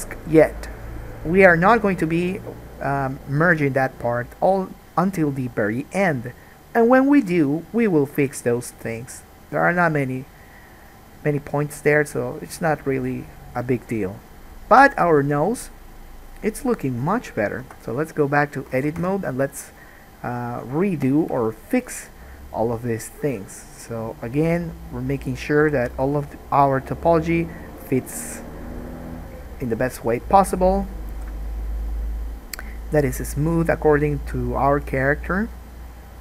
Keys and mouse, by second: 17.8 Tab, 19.0 alt+a, 19.2 1, 20.7 click, 20.7 middle click, 21.5 KP_Decimal, 25.8 g, 27.4 click, 27.4 middle click, 27.9 g, 29.5 click, 29.8 g, 30.9 click, 31.3 g, 32.9 click, 35.7-36.2 drag.